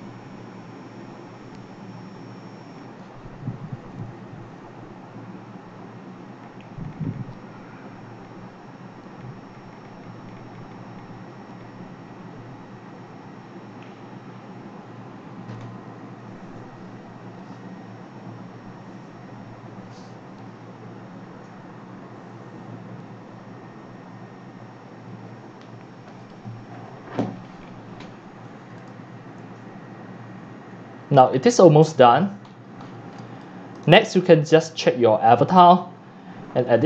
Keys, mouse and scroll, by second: 28.4 click, 28.9 scroll, 29.5 click, 31.0-31.8 drag, 31.8 scroll down 3, 32.3-33.3 middle drag, 32.3-33.2 scroll, 33.6-36.8 typing, 33.6 right click, 33.8 click, 34.3 right click, 34.5 scroll, 34.6 scroll up 1, 34.7 scroll, 34.9 scroll, 34.9 scroll down 10.